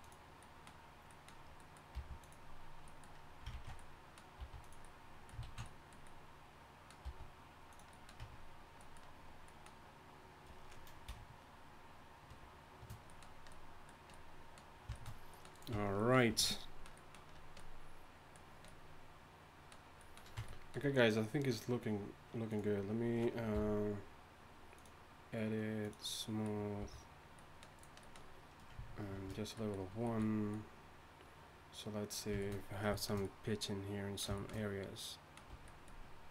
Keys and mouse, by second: 1.9 g, 3.5 ctrl+z, 4.4 s, 5.4 ctrl+z, 7.1 s, 8.2 Tab, 12.3 shift+4, 15.7 Tab, 16.3 a, 20.4 Tab, 23.5 t, 26.8 a, 29.1 ctrl+1, 35.5 Tab.